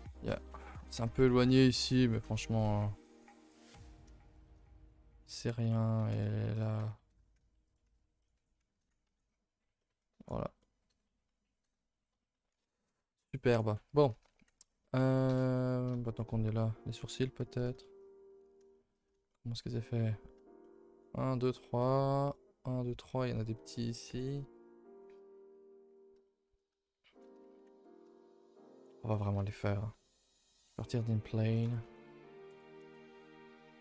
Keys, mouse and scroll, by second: 9.4-9.8 scroll down 4, 9.8-10.2 middle drag, 10.2-10.6 scroll up 5, 10.6-12.0 middle drag, 12.0-12.5 middle drag, 12.5 a, 12.7 a, 13.0 ctrl+s, 13.3 shift+middle drag, 13.6-14.0 scroll up 2, 14.1 a, 14.3 a, 14.6 ctrl+s, 14.8 middle click, 15.3 KP_0, 16.1 shift+middle click, 17.0-17.3 scroll up 1, 17.3 z, 17.8 middle click.